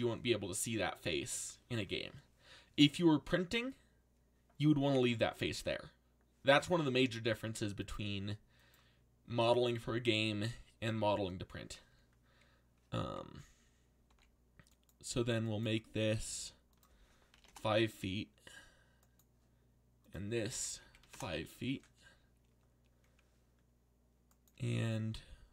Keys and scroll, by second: 14.1 z, 17.3 5, 20.6-21.5 typing.